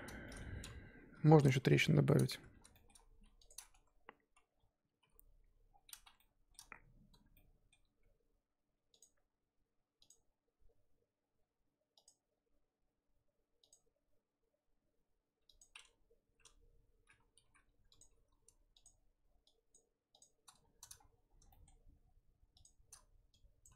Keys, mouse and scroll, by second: 0.2-1.5 shift+middle drag, 1.5 KP_1, 2.7 shift+middle click, 3.0-3.5 scroll up 1, 3.5 click, 3.7 Tab, 4.5-5.0 scroll up 1, 5.0 k, 5.7-6.2 scroll down 1, 6.2-10.3 shift+middle drag, 17.4 3, 18.0 click, 18.8 shift+click, 19.7 shift+click, 21.0-21.5 scroll up 6, 21.5-22.6 shift+middle drag, 22.6 shift+click, 23.6 click.